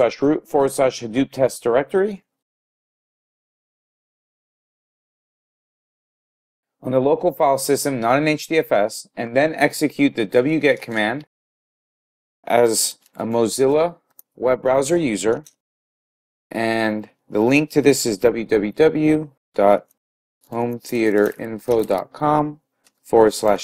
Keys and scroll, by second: 2.4-5.7 typing, 10.9 typing, 15.3-16.6 typing.